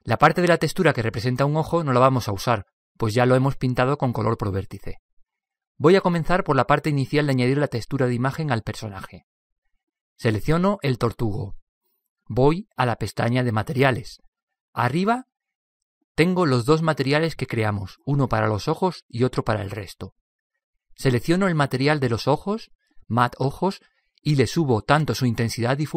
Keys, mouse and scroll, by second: 13.0-14.8 drag, 17.2-20.3 drag, 21.6-24.6 drag.